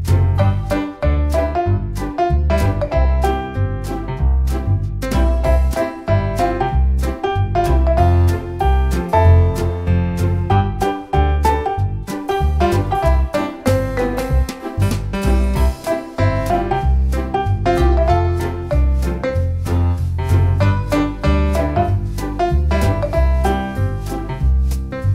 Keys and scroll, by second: 9.6 Escape, 11.8-12.9 typing, 14.5 space, 16.8 e, 16.9 space, 17.9 Escape, 19.0 m, 19.1 space, 20.1 1, 20.3 0, 21.0 Return, 23.9 space, 24.8 1.